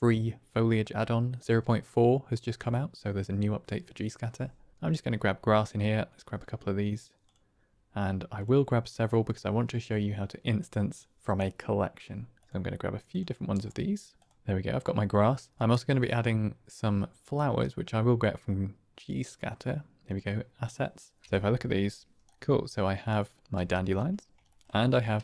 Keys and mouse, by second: 7.3-12.4 drag, 13.0-14.4 drag, 15.5 click, 20.0 click, 21.2 KP_Decimal, 22.2 click, 23.1 click, 23.5 g, 24.4 shift+drag.